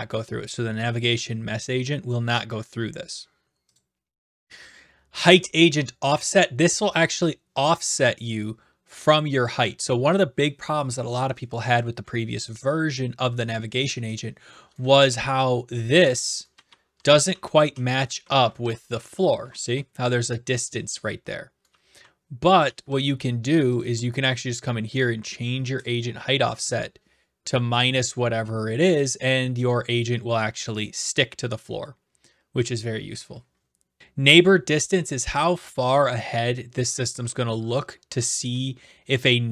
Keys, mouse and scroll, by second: 3.9 click, 14.2 click, 14.7-19.1 typing, 15.9 middle click, 18.0 right click, 19.2 right click, 21.5-23.1 typing, 23.0 right click, 23.8 click, 28.8 click, 29.7 click.